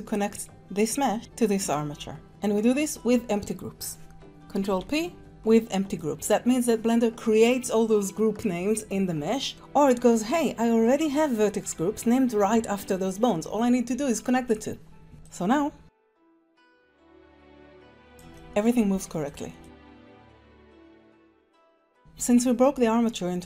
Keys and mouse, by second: 4.7 ctrl+p, 15.1 ctrl+Tab, 15.2 click, 15.4 g, 16.1 g, 16.4 drag, 16.8 drag, 17.2-18.5 typing, 17.5 click, 17.8 click, 18.4 click, 18.7 middle drag, 19.1 click, 19.2 middle click, 19.6-20.9 typing, 20.0 click, 21.2 alt+g, 21.2 alt+s, 21.3 drag, 21.5 ctrl+Tab, 21.6 drag.